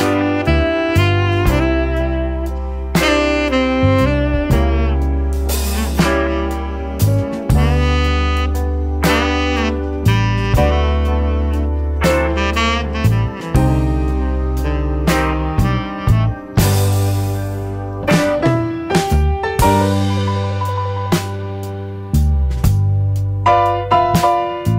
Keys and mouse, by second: 0.1 drag, 0.6 shift+click, 1.7 click, 10.5 shift+click, 10.6 shift+middle click, 14.8-17.8 drag, 18.0 drag, 19.5-22.3 drag, 22.9-24.7 drag.